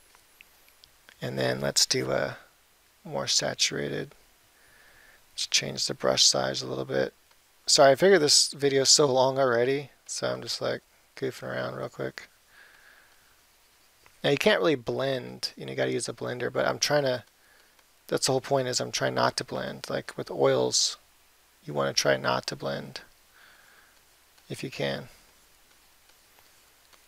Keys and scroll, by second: 6.0 [.